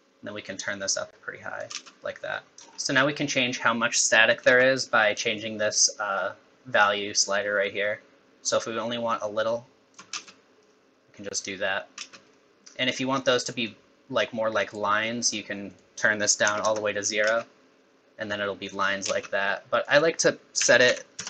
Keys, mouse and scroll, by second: 1.7 space, 2.6 scroll up 4, 4.5 space, 5.4 shift+click, 10.1 space, 12.0 space, 12.3 middle click, 13.4 middle click, 15.7 click, 17.2 space, 19.0 space, 19.8 click.